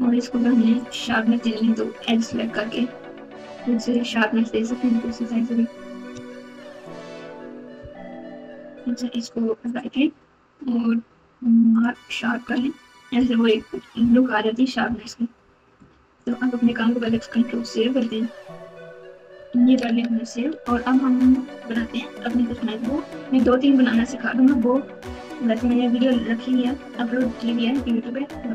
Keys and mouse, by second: 0.7 click, 1.0 Tab, 2.2 2, 3.9 click, 5.0 KP_9, 7.9 KP_9, 9.6-11.8 right drag, 12.5 Tab, 14.0 KP_4, 14.8 KP_6, 16.1 click, 17.7 ctrl+s, 19.4 KP_Multiply.